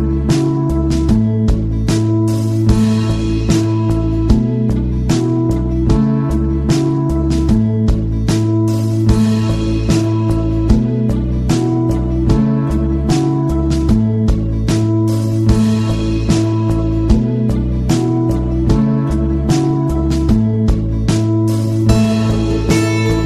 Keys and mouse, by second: 0.6 right click, 6.8-7.2 middle drag, 7.7-8.1 middle drag, 9.1 middle click, 21.0-21.4 middle drag, 21.9-22.3 shift+middle drag, 22.6 middle click.